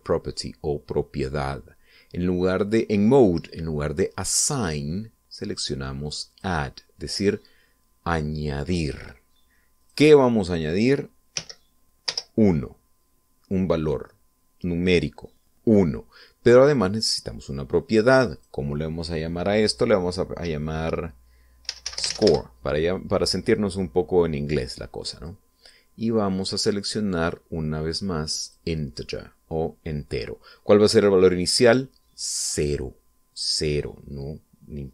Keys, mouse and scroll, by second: 0.0 click, 5.4 click, 7.2 click, 10.8 click, 12.3 1, 13.0 Return, 18.0 click, 19.4 click, 22.6-23.1 typing, 23.2 Return, 26.1 click, 29.4 click.